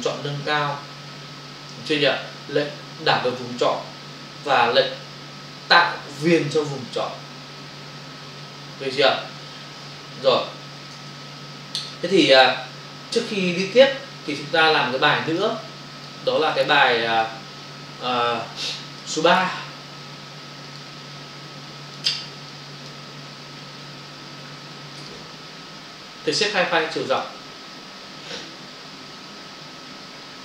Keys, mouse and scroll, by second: 13.7 ctrl+alt+w, 15.2 click, 17.1 click, 19.1 click, 19.4 double click, 20.7 click, 21.1 click, 22.5 click, 25.0 click, 27.1 click.